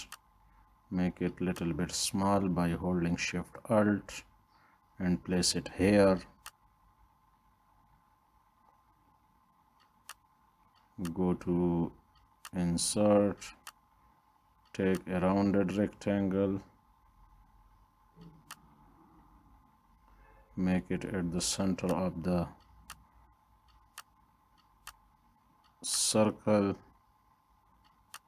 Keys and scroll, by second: 5.4 Down, 5.8 Down.